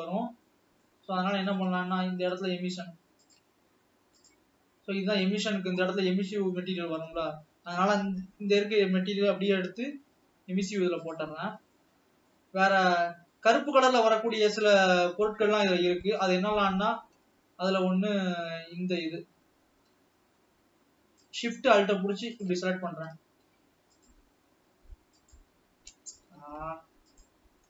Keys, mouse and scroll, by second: 0.3 scroll up 3, 0.6 scroll down 3, 1.0-2.5 middle drag, 2.5-3.1 scroll up 5, 3.5 click, 3.7 Tab, 4.5 click, 4.6 scroll down 2, 5.0-5.5 scroll up 4, 5.9-6.7 scroll down 3, 9.9 g, 11.5 scroll down 1, 11.9 middle click, 12.7-13.5 scroll up 3, 13.5-14.7 middle drag, 16.2 middle click, 16.7-17.1 scroll up 1, 17.1 scroll down 1, 17.3 middle click, 18.1-18.6 scroll up 1, 18.6 shift+middle click, 19.3 scroll up 1, 21.5 alt+shift+click, 22.7 alt+shift+click, 24.2 alt+shift+click, 25.5 alt+shift+click, 26.2 ctrl+z, 27.3 alt+shift+click.